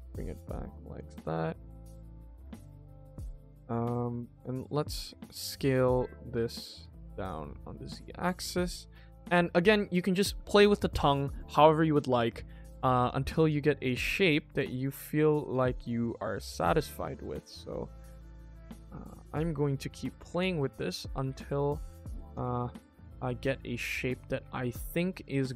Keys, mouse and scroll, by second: 1.1 middle click, 1.9 middle click, 2.5 middle click, 3.2 alt+click, 3.6 alt+click, 3.9 alt+click, 4.5 g, 8.7 shift+middle click, 9.1 middle click, 9.6 alt+click, 10.2 alt+click, 10.5 alt+click, 12.9 alt+click, 13.3 alt+click, 13.7 alt+click, 14.1 alt+click, 14.4 alt+click, 14.7 alt+click, 15.0 alt+click, 15.3 alt+click, 15.6 alt+click, 16.0 alt+click, 16.4 middle click, 16.8 click, 17.0 middle click, 17.5 alt+click, 18.0 g, 19.2 middle click, 20.7 alt+click, 21.1 g, 22.3 Tab, 22.5 middle click, 24.1 middle click, 24.4 Tab, 25.4 alt+click.